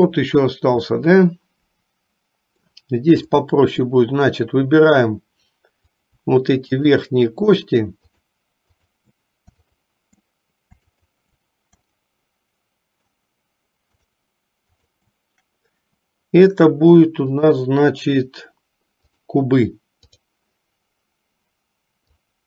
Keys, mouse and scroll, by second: 1.1-2.9 middle drag, 3.5 middle click, 6.0 click, 7.0 shift+click, 7.7 shift+click, 8.3 shift+click, 8.9 shift+click, 9.8 shift+click, 11.0 shift+click, 12.0-13.2 shift+middle drag, 14.9 shift+click, 17.5-19.5 drag, 20.1 click, 22.1-22.4 drag.